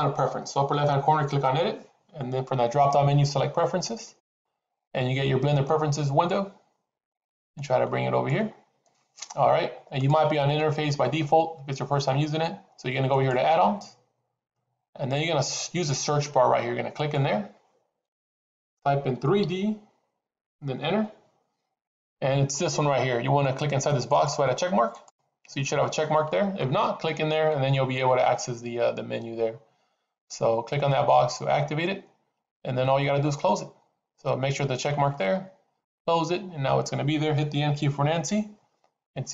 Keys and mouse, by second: 38.0 n.